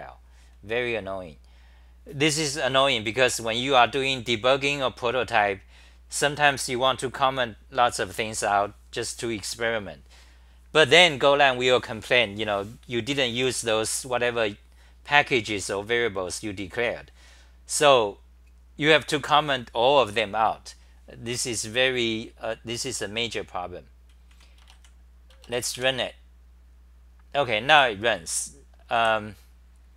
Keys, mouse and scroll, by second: 24.1 c, 24.3 c, 27.7 w, 28.9 d.